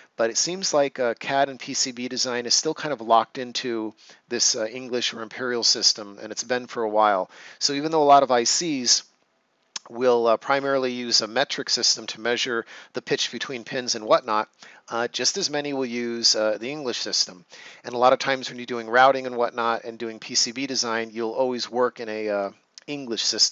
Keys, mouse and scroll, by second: 6.4 click.